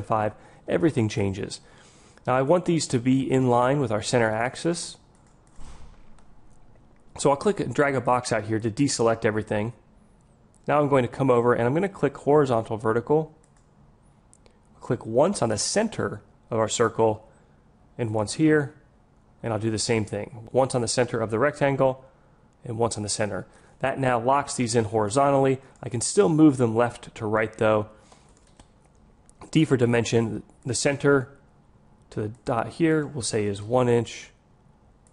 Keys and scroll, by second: 29.4 d.